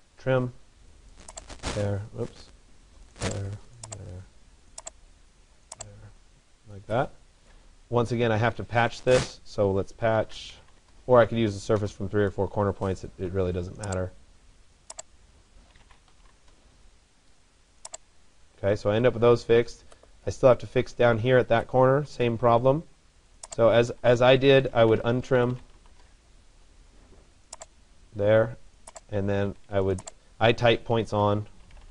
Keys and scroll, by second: 8.2 Escape, 16.1 Return, 23.6 Escape.